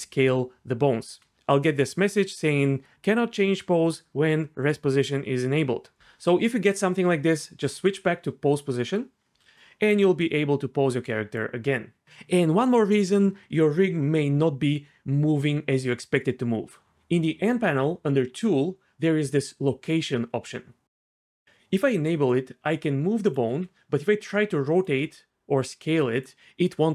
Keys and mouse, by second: 1.3 r, 8.6 click, 9.5 r, 9.8 r, 21.1-21.4 drag, 21.4 g, 21.8 g, 23.2 click, 23.5 r, 24.7 click, 25.0 s, 26.1 click.